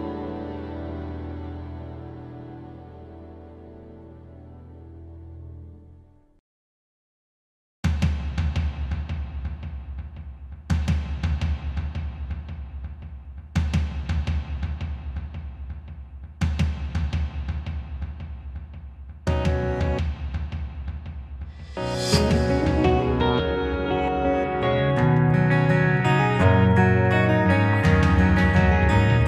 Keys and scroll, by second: 0.0 ctrl+z, 1.0 ctrl+z, 1.6 ctrl+z, 3.6 ctrl+z, 4.0 ctrl+e, 4.3 ctrl+e, 6.0 ctrl+z, 6.2 ctrl+z, 7.3 ctrl+z, 9.1 ctrl+z, 10.8 ctrl+z, 11.9 ctrl+z, 15.5 ctrl+z, 18.8 ctrl+z, 20.7 ctrl+z, 21.4 ctrl+z, 21.9 ctrl+z, 22.3 ctrl+z, 25.8 ctrl+z, 27.3 ctrl+d, 27.7 ctrl+t.